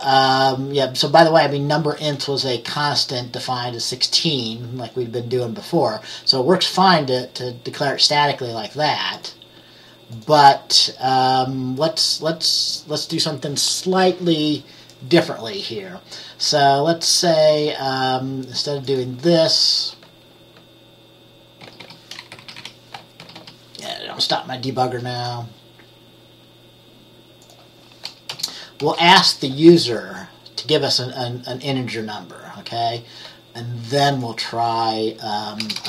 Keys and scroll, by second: 21.5-23.5 typing, 22.5 Left, 22.7 Left, 24.8 typing, 28.4 BackSpace, 28.9 BackSpace, 35.8 BackSpace.